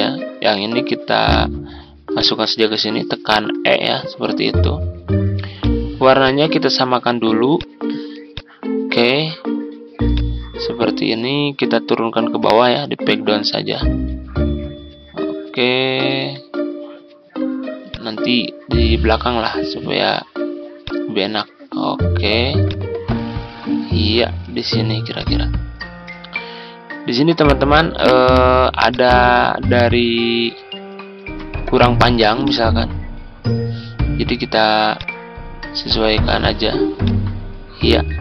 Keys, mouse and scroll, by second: 2.1 shift+click, 3.4 e, 5.5-9.4 drag, 12.4 ctrl+Page_Down, 15.9 ctrl+Page_Up, 17.9-20.4 drag, 26.1 ctrl+scroll up 1, 28.8-37.0 drag.